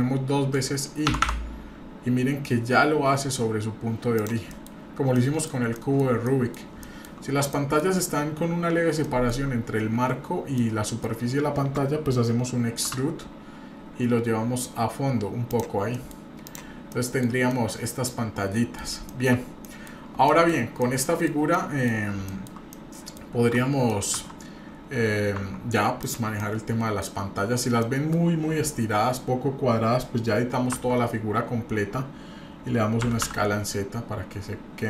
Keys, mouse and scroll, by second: 1.1 i, 4.5 middle click, 4.8 scroll up 1, 5.1 middle click, 5.7 middle click, 6.2 middle click, 6.8 shift+middle click, 7.2 scroll up 2, 7.5 middle click, 8.1-8.7 scroll up 1, 8.7-9.0 scroll down 1, 9.0 shift+middle click, 10.5 middle click, 12.8 e, 15.9 middle click, 16.4 click, 16.8-17.5 scroll down 3, 16.9 middle click, 17.5-18.8 middle drag, 19.1 shift+middle click, 19.3 scroll down 1, 19.6 middle click, 20.3 shift+middle click, 20.5 scroll down 1, 20.8 middle click, 21.5 middle click, 22.3 shift+middle click, 22.7 middle click, 23.4 Tab, 23.9 middle click, 25.4 Tab, 26.0 click, 26.4 middle click, 27.4-27.7 scroll up 1, 27.8 middle click, 30.7 Tab, 33.0 s.